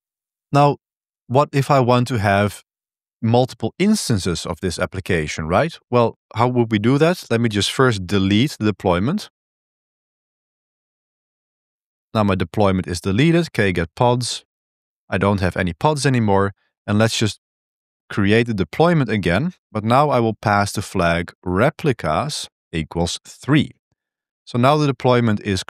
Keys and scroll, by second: 0.0-0.5 typing, 7.2-10.0 typing, 10.3 Tab, 11.2 Return, 12.7-15.0 typing, 16.7 ctrl+r, 17.2 d, 18.3 e, 18.6 Up, 18.8 Up, 19.1 Return, 19.5 space, 20.7-23.4 typing, 23.7 Return.